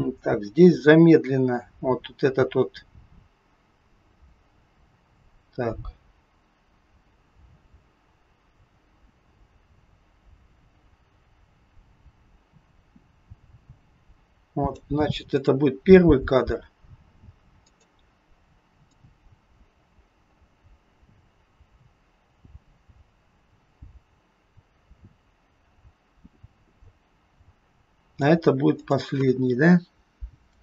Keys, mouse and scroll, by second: 0.5-1.6 scroll up 5, 1.6 click, 15.2 click, 17.6 click, 19.0 click, 28.7 click.